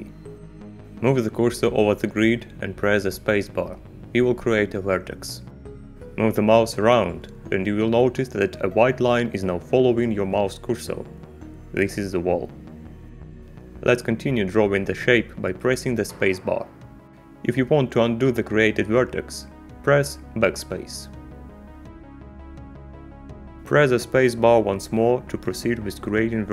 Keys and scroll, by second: 2.7 space, 14.9 space, 20.5 BackSpace, 25.2 space.